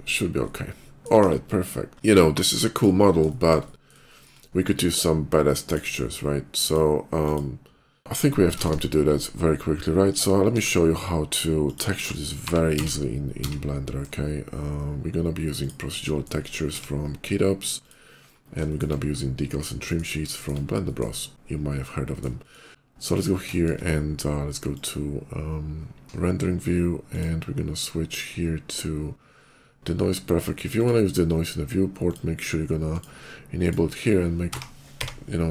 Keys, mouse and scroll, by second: 0.2 shift+middle click, 0.9 KP_5, 1.8 middle click, 1.9 middle click, 3.1 shift+middle click, 3.5 shift+middle click, 3.9 shift+middle click, 5.3 shift+click, 6.3 shift+click, 7.1 click, 8.4 shift+a, 9.9 click, 10.2 s, 11.5 click, 12.3 g, 12.6 z, 12.7 g, 15.4 shift+click, 15.8 shift+middle click, 16.4 s, 17.7 click, 18.2 middle click, 18.5 shift+middle click, 18.9 shift+middle click, 20.2 shift+middle click, 20.7 shift+middle click, 21.7 shift+middle click, 22.3 shift+middle click, 22.7 s, 22.9 click, 23.4 shift+middle click, 24.5 shift+click, 26.8 click, 30.5 click, 31.8 click, 32.6 click, 33.4 click, 34.7-35.5 typing.